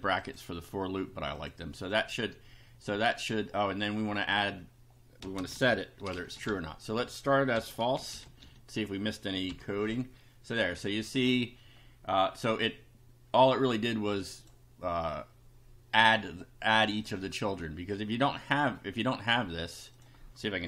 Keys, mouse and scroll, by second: 0.2 click, 1.4 click, 1.9 click, 4.2 click, 5.0-8.9 typing, 9.5 F5, 13.7 click, 16.9 click, 19.2 click, 20.0 click.